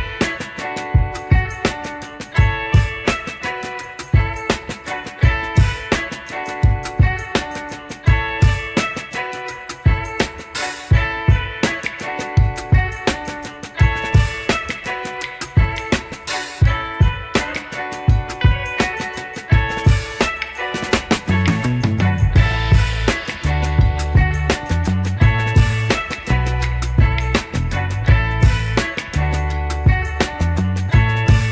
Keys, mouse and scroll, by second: 2.9 Tab, 3.9 middle drag, 4.6 KP_3, 5.6 KP_1, 6.5-7.2 scroll down 2, 7.2 g, 11.6 Tab, 13.5 click, 13.9-14.3 scroll up 1, 14.3 1, 14.9 click, 15.8 shift+click, 17.2 ctrl+b, 22.8 Tab, 23.4 click, 24.0-24.5 middle drag, 25.2 click, 25.8 click, 26.7-27.6 scroll down 2, 26.9-28.2 middle drag, 28.5 click, 29.9 s.